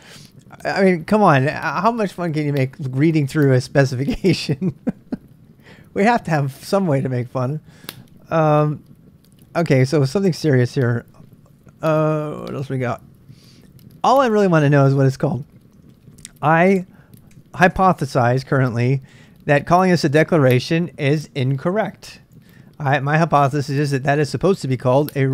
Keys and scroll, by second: 15.9 super+Tab, 17.3 super+Tab, 22.3 super+Tab.